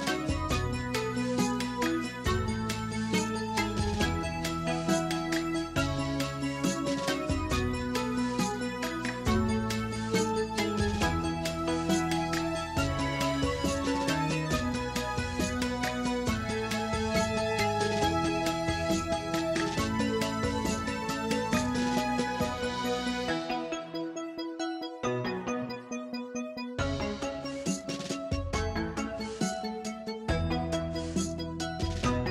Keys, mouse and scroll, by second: 0.0-1.0 typing, 0.5-1.0 middle drag, 1.6 click, 1.7-2.3 middle drag, 2.3-6.8 typing, 2.7-3.0 middle drag, 3.3 middle click, 4.3 middle drag, 4.9 middle click, 5.5 middle click, 6.5 middle click, 7.1-8.0 middle drag, 8.3 middle click, 8.5 r, 9.0 middle click, 9.3 r, 9.4 middle click, 10.0 r, 10.3-11.2 middle drag, 11.4-13.6 typing, 12.3-12.8 middle drag, 14.3-15.2 middle drag, 15.4-16.3 middle drag, 16.3 g, 16.6-17.4 middle drag, 17.4 r, 18.0-18.6 middle drag, 18.6 scroll down 5, 18.8 middle drag, 19.1 shift+d, 19.4 middle click, 19.6 scroll up 1, 19.8 shift+middle drag, 20.1-23.8 typing, 20.5 middle click, 21.7 middle drag, 22.4 middle click, 22.8-23.1 middle drag, 23.5 middle click, 24.0-24.9 middle drag, 24.9 r, 25.4 g, 25.6 middle click, 26.2 click, 26.3 scroll up 4, 26.4 middle click, 26.8 g, 27.1 scroll down 2, 27.1 middle click, 27.6 click, 27.8 scroll down 1, 27.9-28.2 middle drag, 28.3-28.6 scroll down 1, 28.6-30.8 typing, 31.0-31.4 middle drag, 31.4 scroll up 2, 31.7 click, 31.8 h, 32.0 click, 32.2 h.